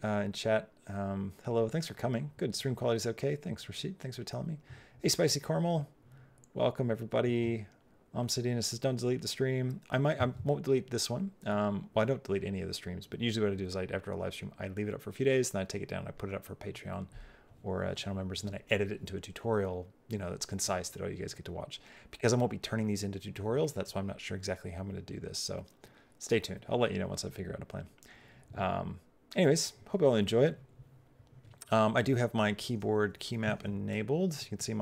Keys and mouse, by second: 33.7 middle click, 34.4 click.